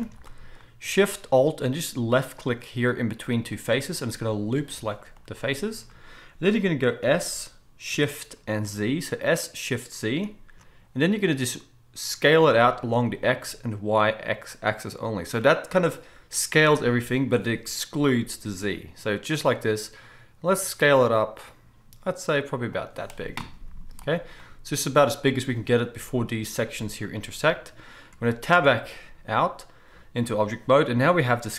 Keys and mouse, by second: 0.0 alt+a, 3.4-5.1 alt+shift+drag, 5.1-28.2 right drag, 7.0 s, 23.8 z, 28.2-31.5 drag, 28.6 Tab.